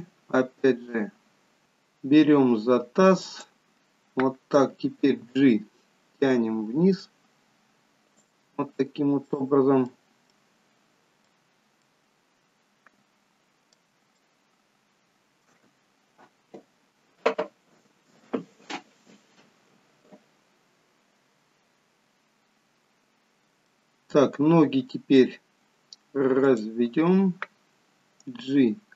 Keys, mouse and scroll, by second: 3.3 click, 5.1 g, 8.7 scroll up 3, 9.3 middle click, 10.4 middle click, 11.5 scroll down 3, 11.9 middle click, 14.2 shift+middle click, 23.1-23.8 scroll down 1, 23.8 middle click, 26.6 click, 28.7 g.